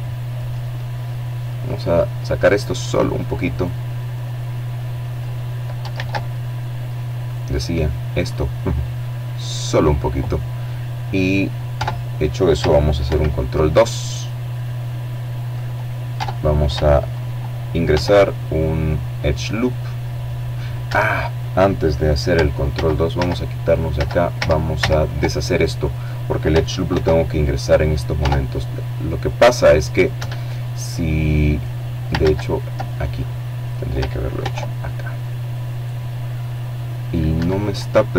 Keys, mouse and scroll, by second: 0.0-1.2 drag, 1.2 right click, 1.9-3.4 drag, 3.6 ctrl+z, 4.0 ctrl+middle click, 4.9 click, 6.2 click, 9.4 Tab, 10.7 ctrl+2, 12.2-13.6 drag, 13.8 Tab, 15.6 ctrl+r, 18.5 Escape, 19.3-20.3 drag, 20.3 ctrl+z, 21.5 z, 23.1-24.1 drag, 24.5 ctrl+r, 25.8 Tab, 26.1-27.1 drag, 27.7 Escape, 28.2-30.2 middle drag, 29.8 ctrl+z, 30.5-31.8 ctrl+middle drag, 32.0 ctrl+r, 35.0 Escape, 36.4 click.